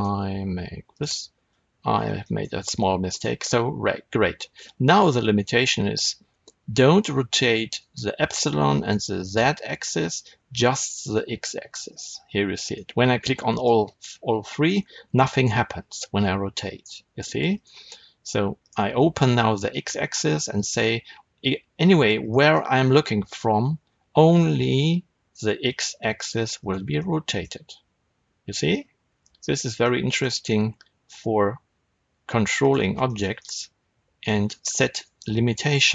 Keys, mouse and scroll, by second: 0.8 click, 2.1-12.6 shift+middle drag, 10.2 r, 12.6 right click, 13.4 click, 14.7 r, 17.5 right click, 18.5 click, 20.1 r, 22.2 right click, 22.4-26.6 middle drag, 23.5 r, 26.6 right click, 26.9-29.5 middle drag, 27.4 r, 29.5 right click, 29.7-32.6 middle drag, 30.3 r, 32.6 right click, 32.9-35.9 shift+middle drag, 35.4 r.